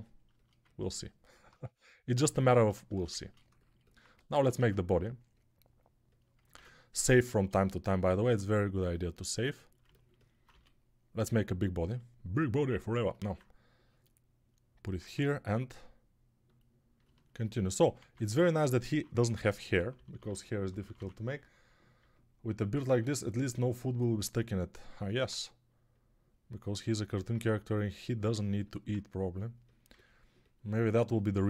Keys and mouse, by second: 2.3 alt+q, 4.0 ctrl+Tab, 4.4 shift+a, 6.6 ctrl+s, 8.1 Tab, 10.4 d, 11.5 s, 12.5-14.1 drag, 14.8 ctrl+Tab, 18.1 ctrl+Tab, 19.2-20.8 typing.